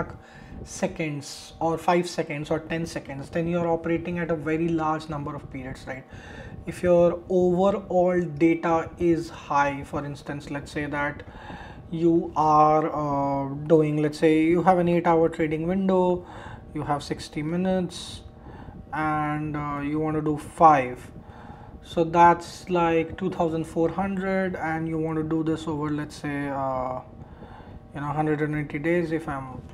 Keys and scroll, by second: 21.1 shift+Return, 24.8 shift+8, 29.2 shift+Return.